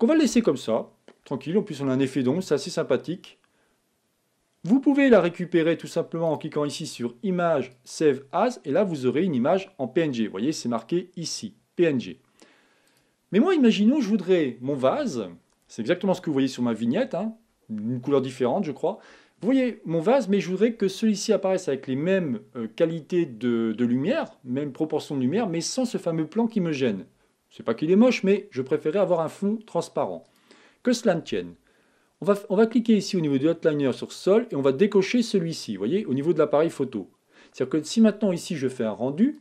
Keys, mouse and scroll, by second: 36.2 click.